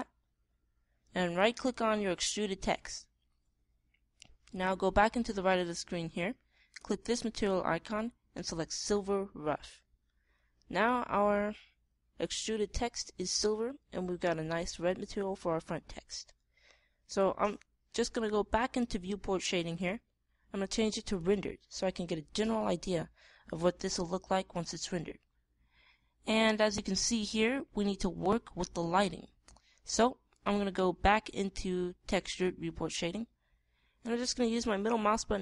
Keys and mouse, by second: 11.4-13.3 middle drag, 16.7-18.1 middle drag, 20.3 click, 35.1 middle click, 35.2-35.4 drag.